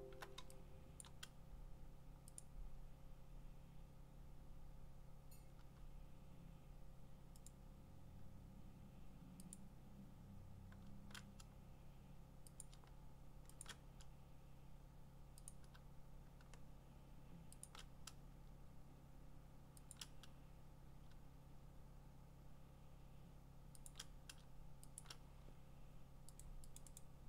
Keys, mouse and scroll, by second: 1.0 click, 2.4 click, 7.5 click, 9.5 click, 12.6 click, 13.6 shift+click, 15.5 click, 17.7 shift+click, 19.9 click, 23.9 alt+click, 25.0 alt+click, 26.4 click, 26.8 click, 27.0 click.